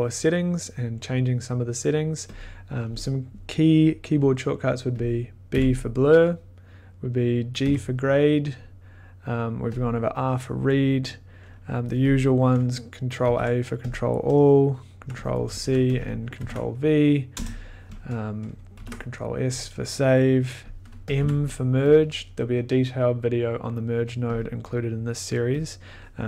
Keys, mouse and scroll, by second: 2.3 click, 5.0 click, 5.5 b, 7.6 g, 9.7 click, 12.1 click, 13.2 ctrl+a, 13.9 click, 15.3 click, 15.5 ctrl+c, 16.0 click, 16.4 ctrl+v, 17.3 BackSpace, 18.0 click, 18.8 ctrl+s, 21.1 click, 21.2 m, 22.3 click, 24.7 click, 25.6 click.